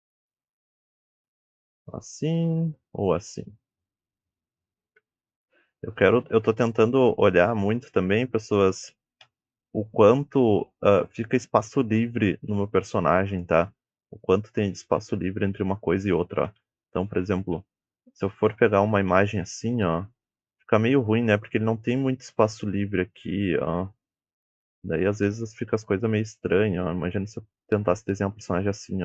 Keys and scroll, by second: 0.0-3.3 typing, 5.0 a, 7.5 w, 9.3 Escape, 17.4-18.2 typing, 20.9 a, 25.7 d, 26.9 d, 27.8 d.